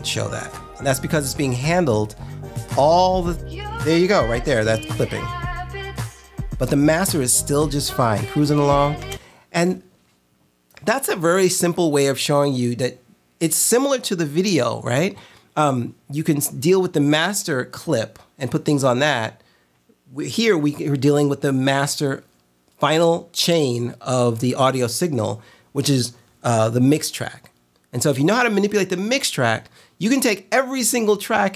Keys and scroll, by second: 9.1 space.